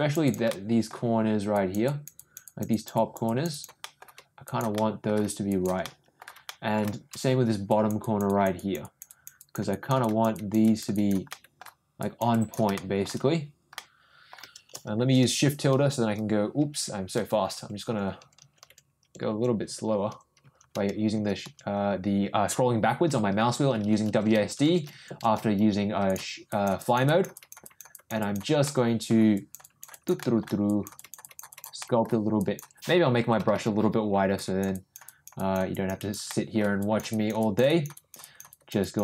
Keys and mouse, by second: 0.2 click, 0.5 middle click, 1.5 click, 1.8 click, 2.1 click, 2.4 click, 2.7 click, 2.9 click, 3.2 click, 3.5 click, 3.8 middle click, 4.4 click, 4.7 middle click, 5.4 click, 5.8 middle click, 6.5 middle click, 7.6 click, 8.0 click, 8.2 click, 8.5 click, 8.8 click, 9.0 click, 9.3 click, 9.7 click, 10.0 click, 10.3 click, 10.6 click, 10.9 click, 11.3 middle click, 12.0 click, 12.3 click, 12.8 shift+middle click, 13.7 middle click, 26.5 click, 26.8 click, 27.0 click, 27.3 click, 27.6 click, 27.9 click, 28.2 click, 28.6 middle click, 29.3 click, 29.6 click, 29.9 click, 30.2 middle click, 30.6 click, 30.9 click, 31.2 click, 31.5 click, 31.8 middle click, 32.4 click, 33.2 ], 33.4 ], 33.5 ], 34.3 click, 34.7 click, 35.0 click, 35.3 click, 35.7 click, 36.0 click, 36.3 middle click, 36.8 click, 37.1 click, 37.4 click, 37.6 click, 37.9 click, 38.2 click, 38.5 click, 38.8 click.